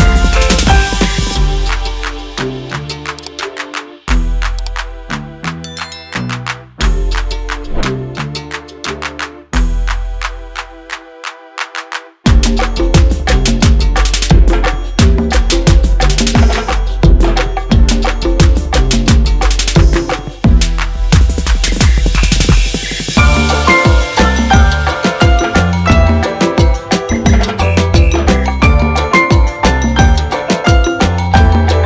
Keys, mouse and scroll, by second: 3.4 3, 6.0 click, 6.4 scroll down 1, 6.8 click, 7.3 scroll up 1, 9.9 click, 10.9 scroll down 1, 11.2 click, 12.1 ctrl+z, 12.9 click, 13.2 ctrl+z, 13.5 click, 14.2 click, 14.7-15.0 scroll up 1, 15.4 click, 16.0-16.5 scroll down 1, 16.5 click, 17.5 ctrl+click, 21.9 j, 23.0 k, 23.6 e, 25.1 ], 25.8 space, 26.8 l, 28.5 r, 29.3 k, 30.4 ].